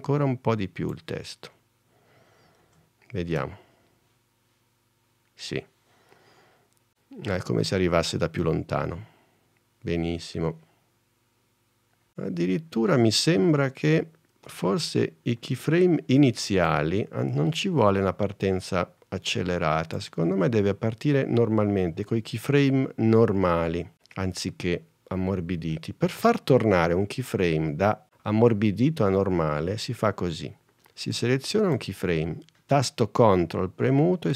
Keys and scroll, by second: 2.7 super+s, 4.0 space, 14.7 space.